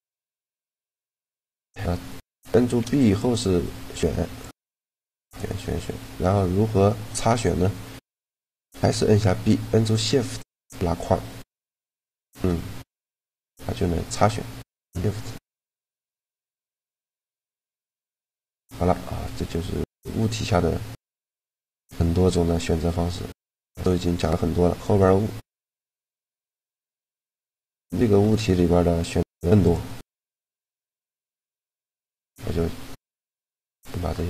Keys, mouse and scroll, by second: 2.5 b, 3.9 b, 4.7 b, 8.9 b, 12.4-14.6 middle drag, 13.7 b, 16.1 b, 18.3 click, 19.7-20.9 drag, 20.9-23.6 middle drag, 25.3-28.9 right drag, 25.6-28.9 drag, 27.8 Tab, 29.3-31.2 drag, 31.7 click, 32.2 Tab, 33.6 a.